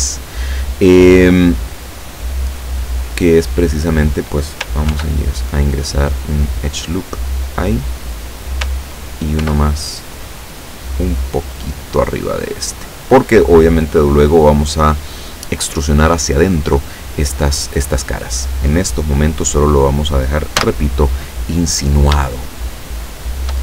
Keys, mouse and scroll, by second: 0.1 scroll up 2, 0.9-1.4 scroll down 2, 3.0-3.7 scroll up 2, 4.9 ctrl+r, 6.5 click, 7.9 click, 9.4 ctrl+r, 10.9 click, 12.3 click, 20.7 z, 21.3-21.7 scroll down 2, 22.4-23.6 shift+middle drag.